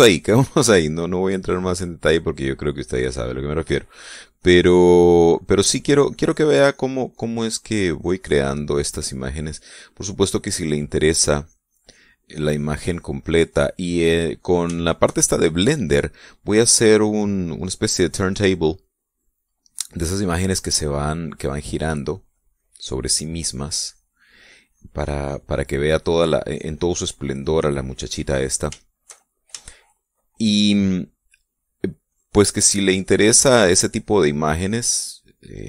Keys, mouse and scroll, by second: 3.2-6.2 drag, 6.4-9.1 drag, 9.3-10.8 drag, 11.0-14.1 drag, 14.3-14.9 middle drag, 14.9-16.2 scroll up 2, 15.3 shift+middle click, 16.2-19.1 drag, 19.4-20.3 middle drag, 19.8-20.3 scroll up 1, 20.3-21.3 scroll up 1, 21.3-23.4 drag, 23.6-27.0 drag, 29.4-31.1 shift+middle drag, 32.7-35.6 drag.